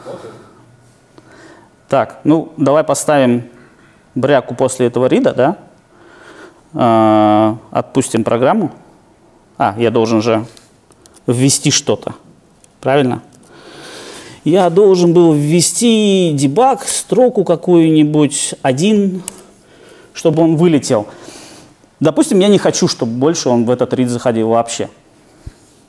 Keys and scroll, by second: 1.7 super+F8, 11.1 super+e, 15.3 super+e, 15.9 Left.